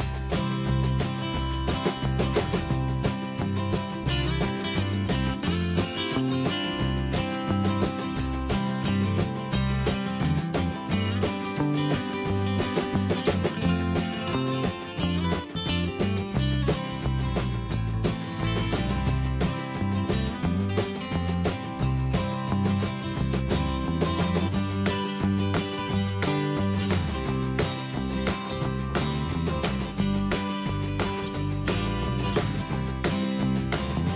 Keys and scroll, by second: 5.5 Escape, 10.7 ctrl+t, 18.1 ctrl+a, 24.3 Escape, 28.9 BackSpace, 29.3 ctrl+a, 32.1 BackSpace, 32.3 Caps_Lock.